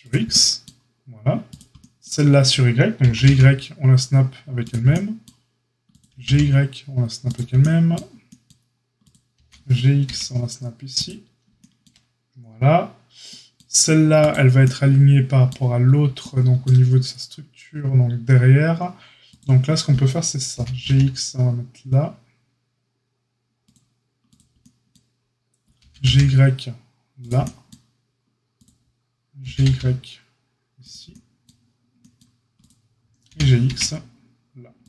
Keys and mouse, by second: 1.4 click, 1.5-34.8 middle drag, 3.0 g, 5.8 click, 9.0 click, 9.3 g, 20.5 g, 25.7 g, 29.4 g, 33.2 g.